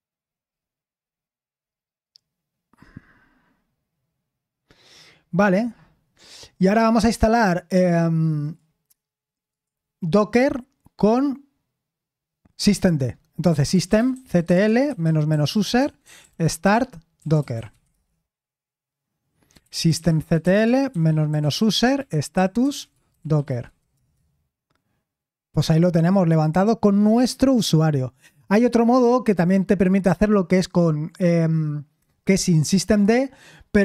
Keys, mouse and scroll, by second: 0.4-2.8 scroll down 1, 2.8-4.1 scroll down 1, 4.1 scroll down 1, 4.2-6.6 scroll up 1, 8.4 click, 9.5 click, 13.2-18.2 typing, 19.2-24.4 typing, 32.8 click.